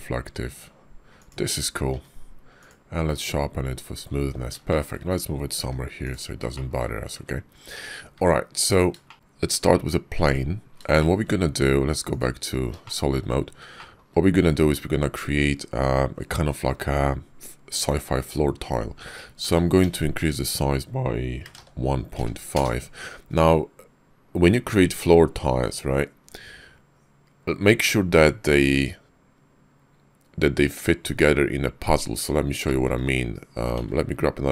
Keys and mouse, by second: 1.8 q, 4.6 shift+click, 5.5 g, 6.4 shift+drag, 7.0 `, 8.1 `, 9.0 shift+click, 9.1 shift+a, 10.8 shift+drag, 12.0-12.6 drag, 12.7 shift+click, 13.6 shift+click, 19.3 s, 32.5 shift+drag, 33.6 shift+a.